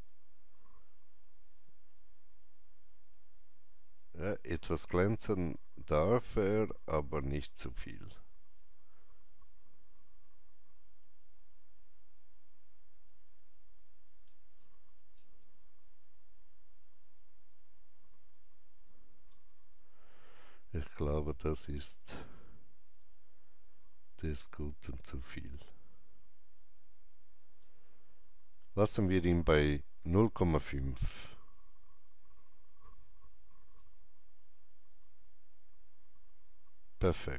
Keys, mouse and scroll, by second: 5.9 scroll down 1, 8.5-21.7 alt+drag, 14.5 alt+right click, 23.0-30.3 alt+drag, 23.0 alt+right click, 30.3 KP_5, 30.6 KP_Enter, 33.1 KP_Enter, 33.1 KP_5, 33.7 shift+right click.